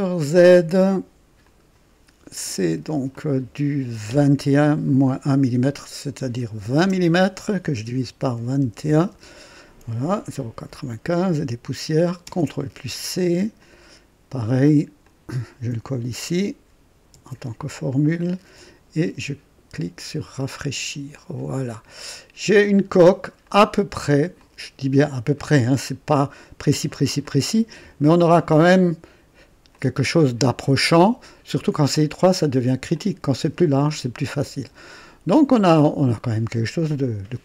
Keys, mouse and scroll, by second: 1.4 click, 3.1 click, 6.5 KP_2, 6.7 KP_0, 8.2 KP_Divide, 8.5 KP_2, 8.8 KP_1, 9.1 Return, 12.2 ctrl+c, 13.5 click, 15.0 click, 17.1 ctrl+v, 17.9 ctrl+click, 19.9 click, 21.1-23.3 drag, 23.4 right click, 24.4 click, 27.2 click, 29.7 click, 30.9 click, 32.9 click, 33.8-37.4 drag.